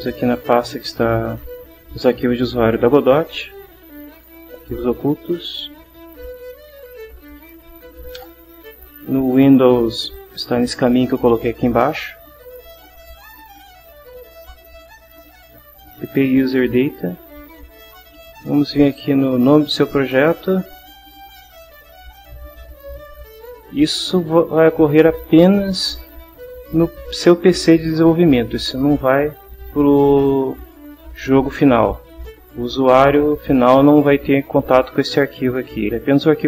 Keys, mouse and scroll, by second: 0.1 click, 1.3 click, 3.3 ctrl+h, 6.3-7.6 typing, 8.3 Return, 9.4 click, 16.8 click, 20.6 click, 21.6 click, 35.9 click.